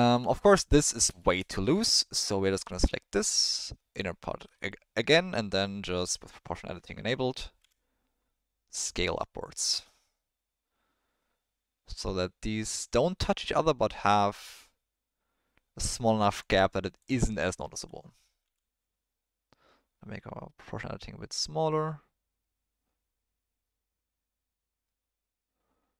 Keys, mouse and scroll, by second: 1.3 shift+middle click, 2.7 middle click, 4.6 ctrl+middle click, 7.6 s, 12.1-14.9 middle drag, 17.0 click, 17.4 ctrl+click, 18.4 s.